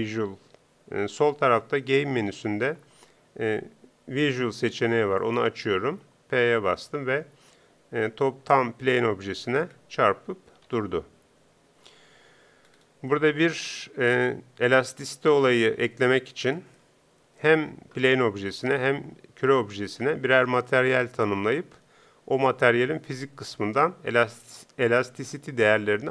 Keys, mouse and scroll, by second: 6.6 p, 9.2 p, 9.8 middle click, 10.6 p, 12.2 p, 13.1-16.2 middle drag.